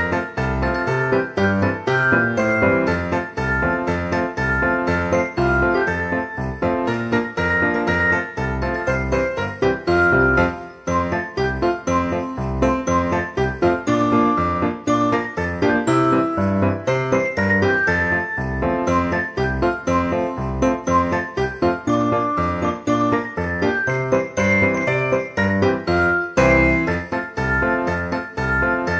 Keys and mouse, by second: 0.7 click, 1.0 e, 2.3 click, 2.7 Tab, 4.1 click, 7.3 click, 8.1 Tab, 9.0 middle click, 9.3 a, 10.6 ctrl+a, 12.5 click, 12.9 Tab, 13.8 click, 16.4 click, 18.4 click, 18.8 ctrl+a, 19.3 click, 19.7 alt+z, 20.5 shift+d, 21.2 click, 21.2 shift+d, 22.1 click, 22.2 shift+d, 22.7 click, 23.3 click, 24.2 click, 25.4 shift+click, 25.8 alt+z, 26.1-27.5 typing, 26.6 click, 27.2 click, 28.2 click, 28.8 alt+z.